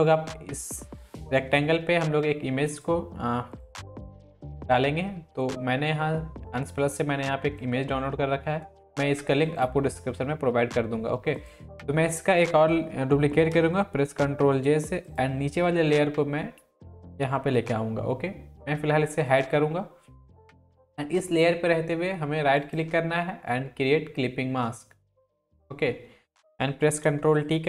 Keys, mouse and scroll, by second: 2.7-6.7 drag, 14.0 click, 14.2 ctrl+j, 15.0-19.2 drag, 16.2-17.1 click, 22.6 right click, 25.2 click, 26.8 ctrl+y, 27.4-27.6 drag.